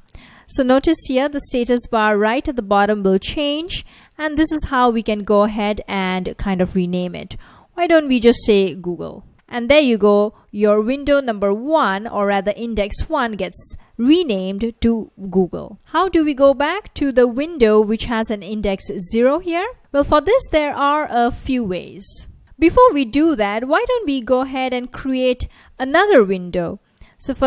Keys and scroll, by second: 3.9-4.5 typing, 8.0-9.8 typing, 10.9 F1, 18.0 F1.